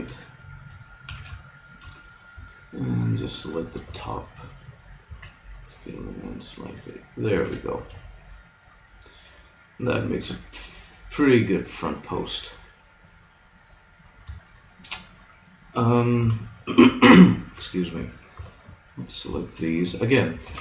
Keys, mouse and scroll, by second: 1.1 a, 1.4-3.9 middle drag, 3.9 b, 5.0 s, 7.4 a, 7.8 middle click, 13.6 middle click, 16.2 KP_1, 18.4 b.